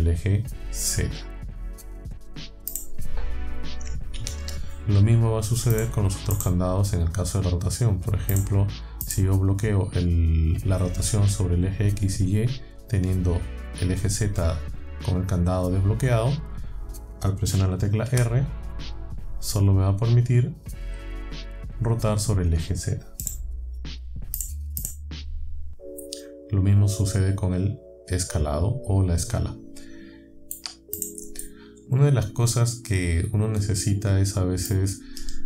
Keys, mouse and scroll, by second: 2.7 click, 4.2 ctrl+z, 5.8 click, 6.4 click, 8.4 click, 9.1 click, 18.1 r, 23.3 right click, 24.4 click, 24.8 click, 30.6 shift+click, 31.0 click, 31.4 click, 31.6-34.8 middle drag.